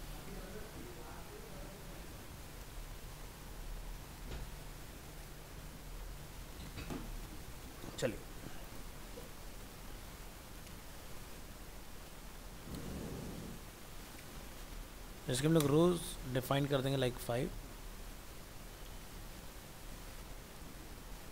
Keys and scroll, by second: 20.0 ctrl+s.